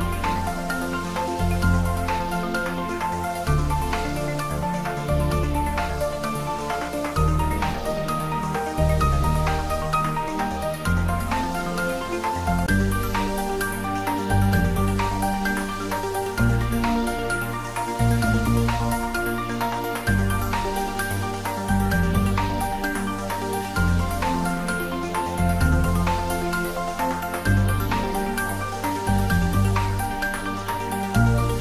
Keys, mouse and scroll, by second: 0.3 Tab, 2.0 ctrl+3, 3.8 ctrl+z, 5.2 Tab, 5.6 a, 6.7 alt+e, 7.7 click, 15.9 click, 17.1-17.4 scroll up 1, 17.8-19.9 middle drag, 19.9 click, 20.7 scroll down 1, 21.8-23.4 scroll up 1, 23.8 ctrl+z, 26.3 click, 28.9-29.6 scroll down 1.